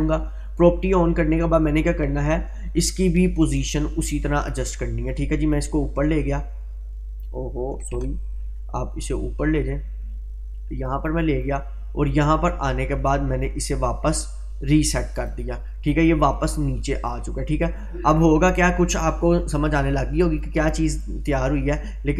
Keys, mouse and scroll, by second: 3.4 click, 6.4-7.3 drag, 8.0 ctrl+z, 9.0-11.5 drag.